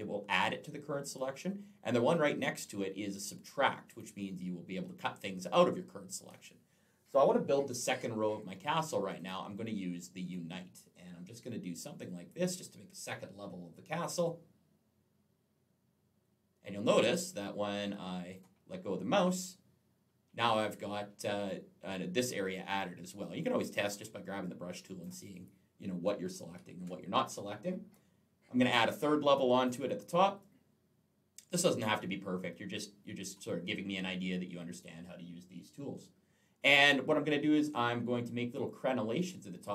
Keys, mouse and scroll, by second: 3.8 click, 9.0 click, 11.8 click, 23.6 click, 24.3 click, 26.3 ctrl+z, 29.4 click, 30.2 click.